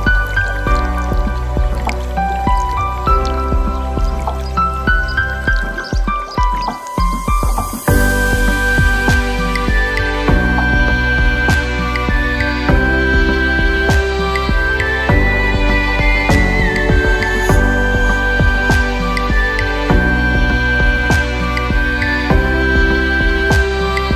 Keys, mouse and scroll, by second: 1.1 shift+drag, 1.4-2.3 middle drag, 2.9 shift+click, 3.6 shift+click, 4.3 shift+click, 5.4 ctrl+KP_Add, 7.0-8.4 middle drag, 9.6 click, 11.0 click, 12.6 click, 13.6 click, 14.3 click, 18.1-18.8 drag, 19.1-20.0 scroll down 2, 20.0-23.3 drag.